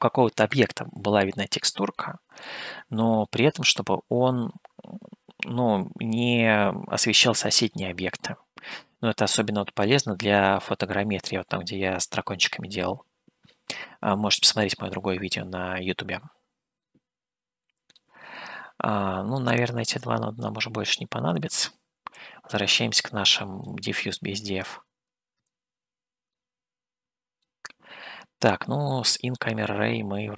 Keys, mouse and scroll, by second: 16.8-18.1 middle drag, 19.8 click, 20.9 click, 22.1-23.7 drag, 24.6-25.7 drag, 26.4-27.5 middle drag, 28.2 middle click.